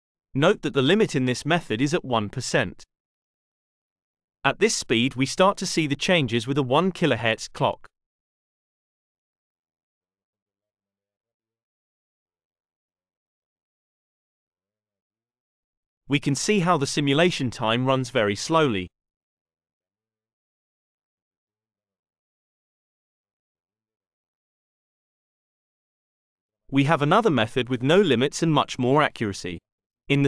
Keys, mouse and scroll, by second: 9.8-11.9 drag, 12.1-14.1 drag, 19.9-21.3 drag.